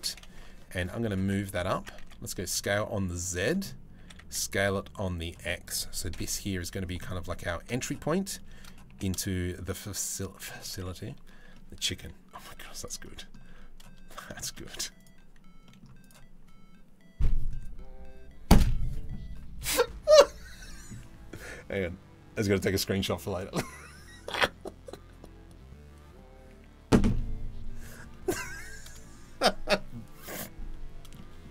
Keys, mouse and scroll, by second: 1.4 Tab, 1.6 s, 3.6 s, 5.7 KP_7, 7.2 z, 8.5 g, 11.1 middle click, 12.1 z, 12.6 middle click, 13.1 z, 14.0 shift+middle click, 15.3 middle click, 15.3 z, 27.7 middle click, 29.9 middle click, 30.8 middle click, 31.2-31.5 scroll down 1.